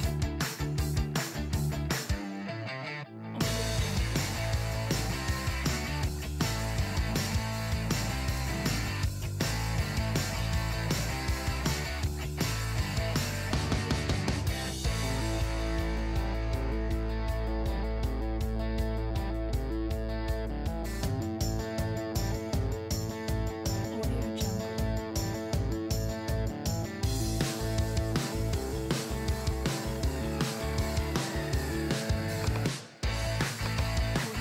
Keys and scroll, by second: 7.2 BackSpace, 14.1 BackSpace, 20.0 BackSpace.